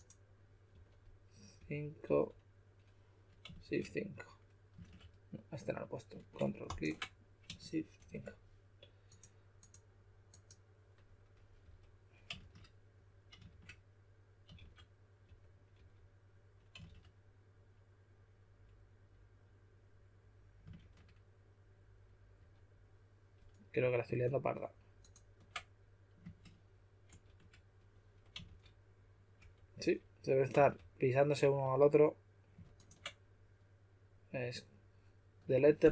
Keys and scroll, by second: 0.7-2.0 typing, 3.6 shift+5, 4.8 shift+5, 7.9 shift+5, 11.6 5, 12.3 shift+5, 13.4 shift+5, 14.5-15.7 typing, 16.8 shift+5, 20.7 shift+5, 22.3 5, 27.0 shift+5, 28.4-30.5 typing.